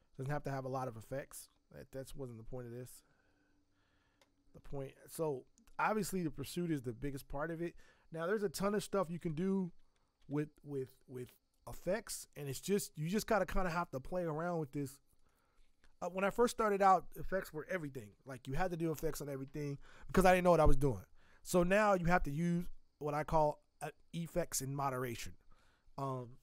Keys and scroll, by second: 9.1 alt+l, 9.5 y, 10.2 g.